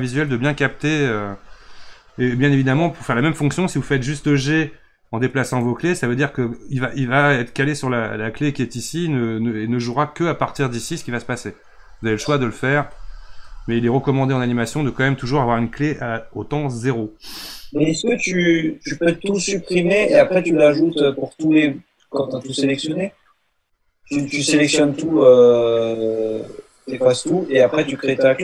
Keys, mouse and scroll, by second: 1.7 ctrl+z, 3.7 g, 13.2 ctrl+z, 13.7 ctrl+z.